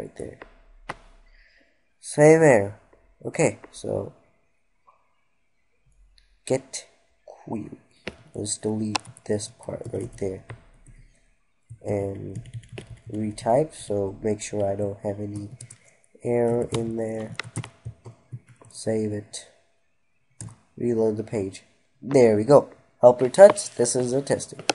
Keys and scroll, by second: 10.9 ctrl+s, 11.9 ctrl+Delete, 17.9 ctrl+s.